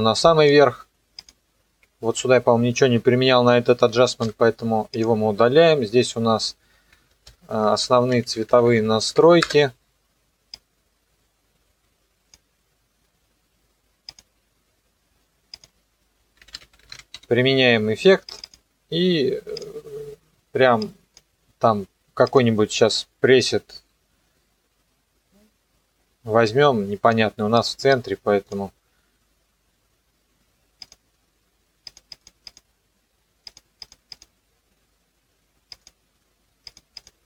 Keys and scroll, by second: 4.2 Delete, 7.3 ctrl+shift+y, 7.9-9.3 typing, 9.4 Return, 16.2-17.7 typing.